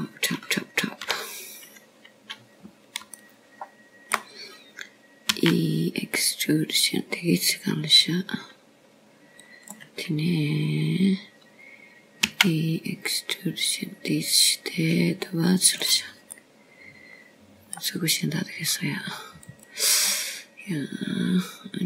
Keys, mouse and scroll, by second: 3.9 KP_7, 6.2 shift+middle click, 8.2 e, 13.1-15.0 scroll down 1, 15.1 e, 19.2 middle click, 20.9-21.6 scroll up 1, 21.6-21.8 scroll up 3.